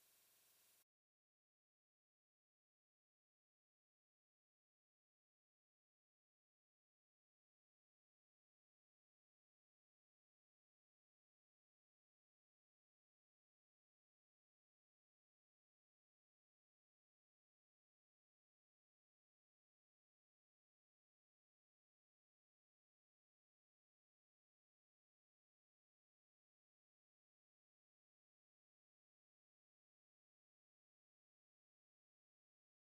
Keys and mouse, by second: 17.7 middle click, 17.9 click, 18.8 middle click, 19.0 click, 19.4 middle click, 19.5 click, 20.1 middle click, 20.2 click, 21.4 middle click, 21.9 click, 22.4 middle click, 22.5 click, 23.1 middle click, 23.2 click, 23.4 middle click, 23.6 click, 23.8 middle click, 23.9 click, 24.1 middle click, 24.3 click, 24.5 middle click, 24.7 click, 24.9 middle click, 25.1 click, 25.4 middle click, 25.5 click, 25.9 middle click, 26.0 click, 26.3 middle click, 26.6 click, 27.0 middle click, 27.2 click, 27.7 middle click, 28.0 click, 28.5 middle click, 28.6 click, 29.8 click, 30.6 click, 30.9 middle click, 31.1 click, 31.7 middle click, 32.2 click.